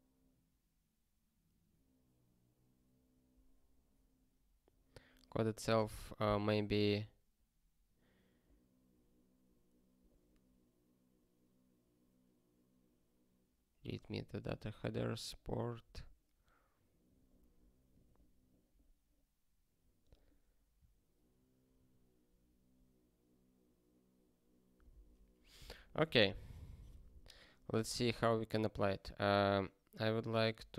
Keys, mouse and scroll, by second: 15.1 click, 17.9 click, 19.5 scroll down 1, 24.7 super+b, 27.8 super+b, 28.0 super+b.